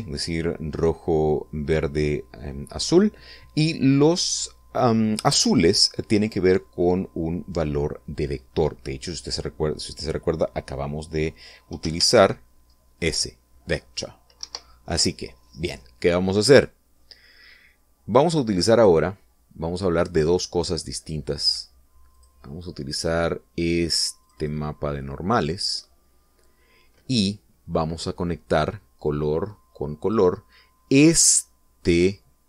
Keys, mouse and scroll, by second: 13.4 shift+a, 15.9 Escape, 20.3 click, 22.5 click, 23.6 click, 25.7 click, 29.6-31.8 drag.